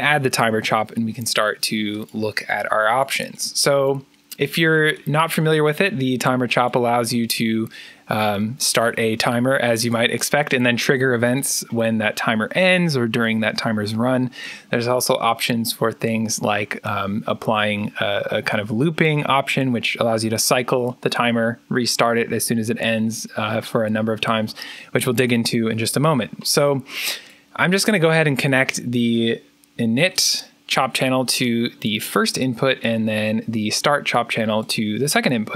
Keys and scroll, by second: 0.0-1.0 typing.